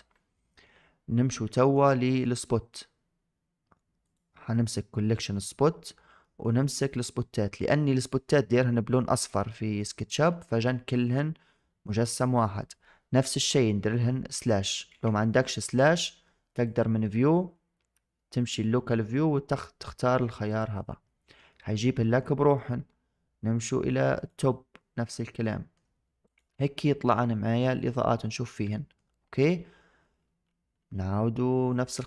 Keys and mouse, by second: 1.4 shift+drag, 1.8-2.1 middle drag, 2.3 shift+middle drag, 3.9 click, 6.1 middle drag, 6.7 click, 9.8-10.1 drag, 10.2-10.5 shift+middle drag, 10.8-11.7 shift+middle drag, 14.2 KP_Divide, 16.5-20.5 drag, 21.4 middle click, 24.0-25.2 drag, 25.3-25.6 shift+middle drag, 28.6 shift+middle drag.